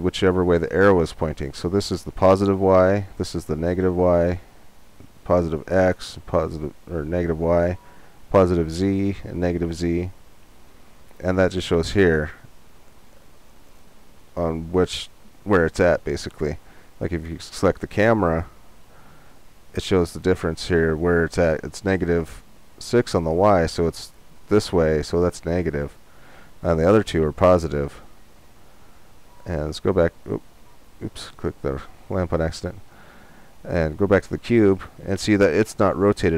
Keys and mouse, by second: 17.9-19.8 drag, 29.3-30.8 drag, 30.8-36.3 right drag.